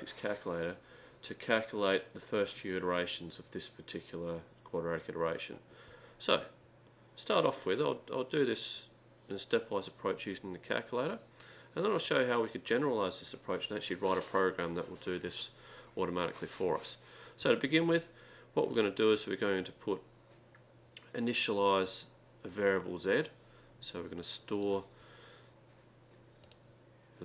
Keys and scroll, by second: 18.7 3, 25.2-27.2 typing.